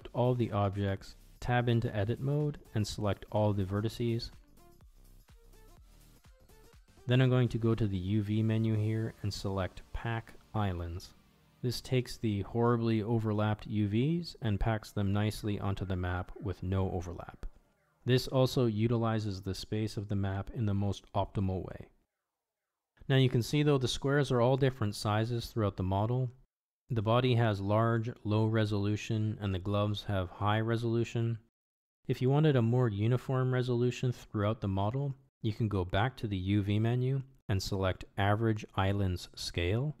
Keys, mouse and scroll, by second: 2.5 Tab, 5.8 a, 9.3-16.2 drag, 20.2 Tab, 21.5 click, 22.3-23.6 middle drag, 24.2-25.2 middle drag, 27.6-29.1 middle drag, 29.7 Tab, 33.0-34.1 drag, 35.8 Tab, 37.4 a, 38.6-40.0 drag.